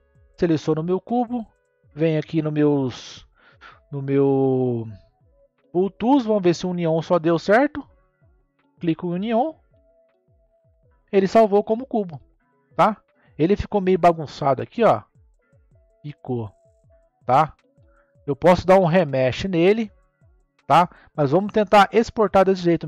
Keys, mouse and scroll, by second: 0.0 shift+click, 1.7 n, 5.3 click, 6.6 click, 11.2-12.0 middle drag, 12.0 scroll down 2, 12.5-13.4 middle drag, 13.4-14.8 scroll up 7, 14.8-18.0 middle drag, 18.0-19.2 scroll down 4, 19.2-22.2 middle drag, 22.6-22.8 scroll up 1.